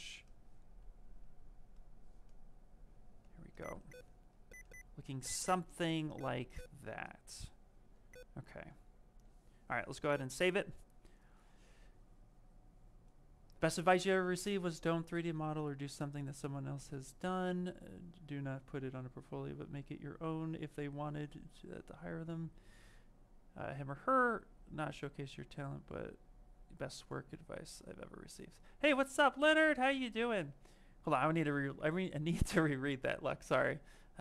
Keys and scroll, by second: 8.5 f.